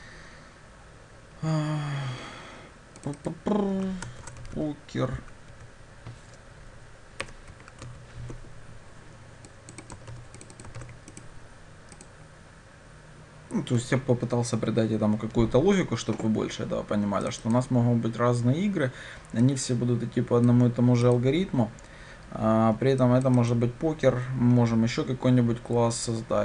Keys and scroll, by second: 8.4 Escape, 10.8 ctrl+c, 12.2 ctrl+shift+F10.